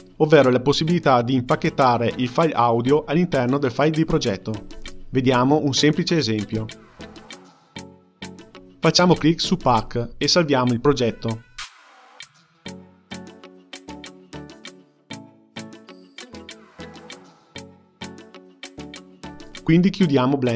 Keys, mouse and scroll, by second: 9.0-10.0 drag, 11.4-17.5 drag, 18.5 click.